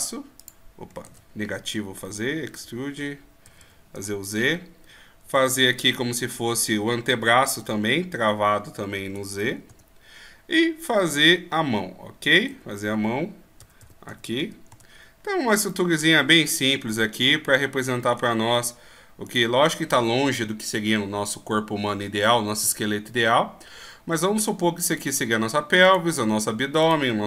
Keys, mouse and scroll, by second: 1.0 ctrl+z, 2.0 e, 15.7 middle click, 19.3 right click, 24.1 middle click, 25.8 right click.